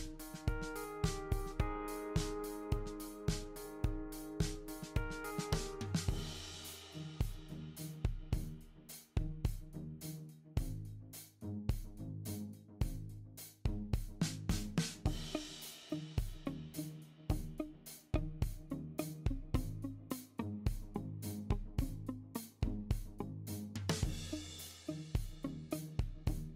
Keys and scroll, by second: 13.2 super+d, 14.2 super+d, 14.9 super+d.